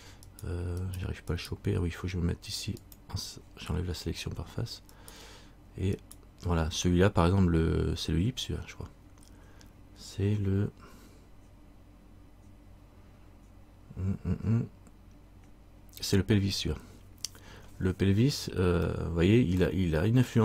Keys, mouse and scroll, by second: 0.4 right click, 2.9 click, 5.1 right click, 6.1 right click, 7.1 middle click, 8.2-9.3 scroll up 1, 10.3 scroll up 1, 19.0 middle click.